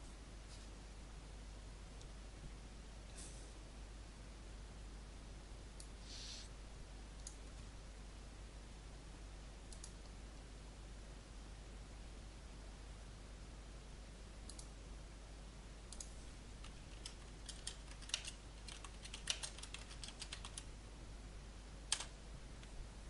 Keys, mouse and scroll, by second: 5.8-8.1 drag, 16.6-20.4 typing, 21.8 Return.